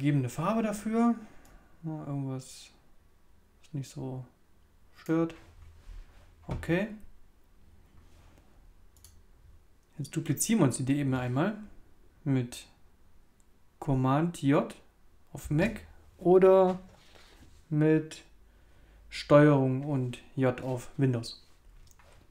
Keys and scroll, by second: 15.4 super+j.